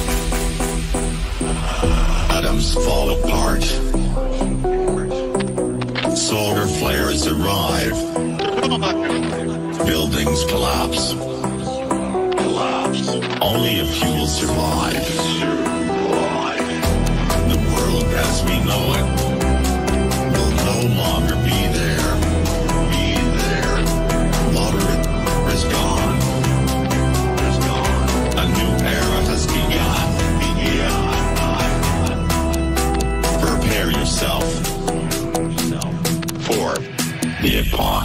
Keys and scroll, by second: 9.5 Caps_Lock, 10.9 p, 13.0-15.7 typing.